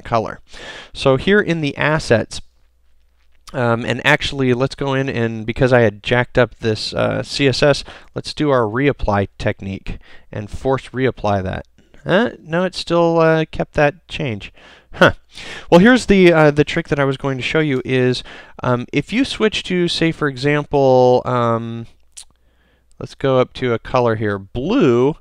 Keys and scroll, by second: 1.5 super+l, 8.1 super+l, 17.9 super+l.